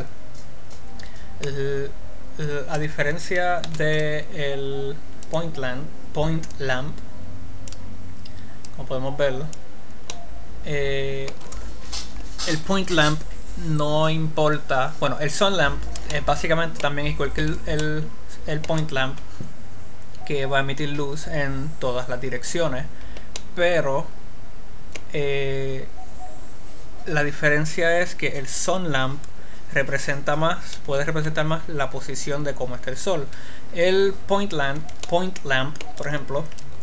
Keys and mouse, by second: 4.1 shift+a, 8.9-10.7 drag, 10.7-12.9 middle drag, 16.6 middle click, 23.9-25.4 middle drag, 35.7 middle click.